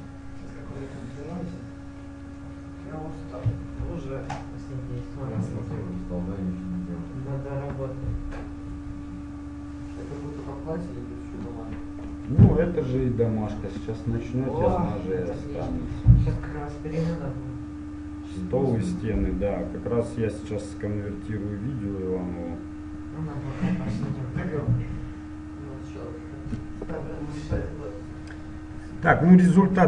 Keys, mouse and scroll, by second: 28.0-29.8 middle drag.